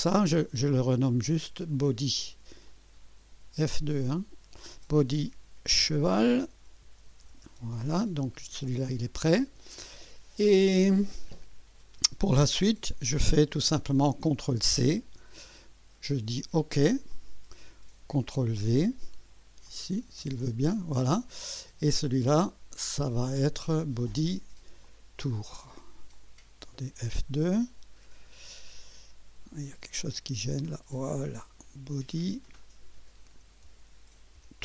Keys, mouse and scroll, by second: 1.7 click, 2.2 F2, 2.7 click, 5.1-7.7 typing, 15.0 ctrl+c, 17.1 click, 18.4 ctrl+v, 19.7 click, 20.2 ctrl+v, 22.4 click, 23.3 F2, 24.8 click, 25.5 click, 26.1 click, 27.1 F2, 30.0 click, 30.6-32.4 drag, 33.7-34.6 typing.